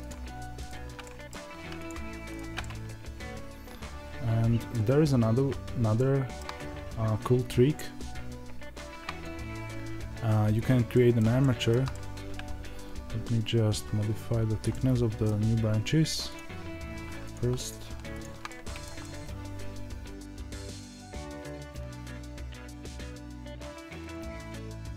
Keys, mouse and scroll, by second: 0.0 click, 0.6 ctrl+right click, 1.0 middle click, 1.8 click, 2.3 ctrl+right click, 2.6-12.2 middle drag, 8.5 scroll up 1, 9.1 Tab, 12.2-13.3 scroll down 1, 13.3-14.6 scroll up 1, 14.6-16.3 middle drag, 16.3 ctrl+click, 17.2 click, 18.9-24.0 middle drag, 20.4 ctrl+a, 23.2 ctrl+a, 24.0 click, 24.3 ctrl+a, 24.7 middle click.